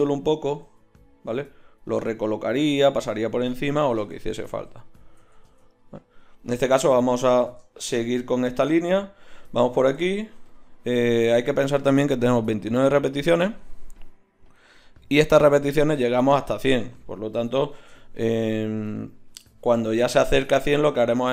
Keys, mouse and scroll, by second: 0.7 g, 1.9 g, 4.2 ctrl+z, 4.6 ctrl+z, 5.3 ctrl+z, 10.9 Tab.